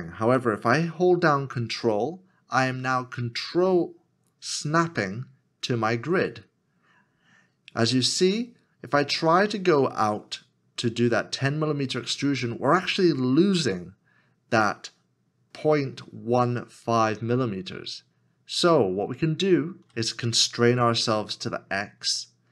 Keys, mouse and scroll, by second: 22.0 x.